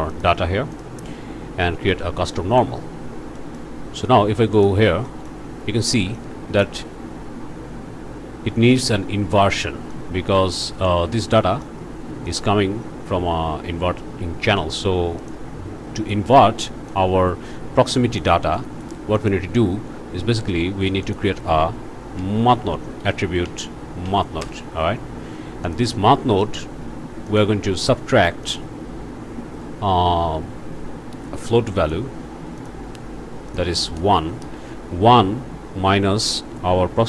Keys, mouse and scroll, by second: 0.1 click, 0.7 click, 2.5 click, 3.4 click, 4.6 click, 5.1 click, 6.0 alt+a, 6.2 alt+click, 8.7 click, 9.9 click, 11.4 click, 12.3 click, 15.2 click, 16.1 click, 16.9-18.4 drag, 18.6 click, 19.2 click, 20.0 shift+a, 21.0 click, 22.2 m, 22.4 a, 22.5 t, 22.7 h, 23.4 Down, 24.4 Return, 25.7 click, 27.3 click, 28.5 click, 31.8 click, 32.6 click, 33.5 click, 34.2 KP_1, 34.4 Return, 36.8 ctrl+c.